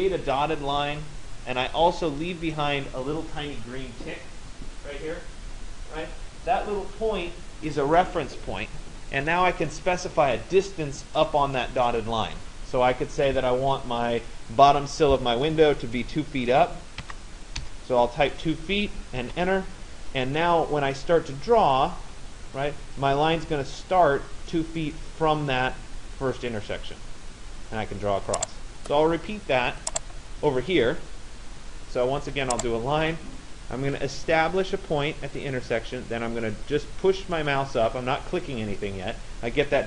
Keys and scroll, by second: 16.6 2, 19.2 Return.